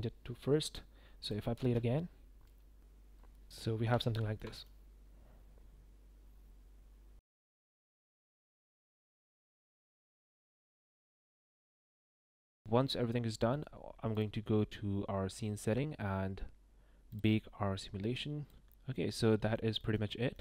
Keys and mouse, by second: 1.5 space, 5.0 space, 5.4 space, 11.0 shift+click, 11.1 shift+middle drag, 11.5 click, 14.1 click, 18.9 click, 19.3 shift+middle click, 19.9 shift+middle click, 20.3 middle click.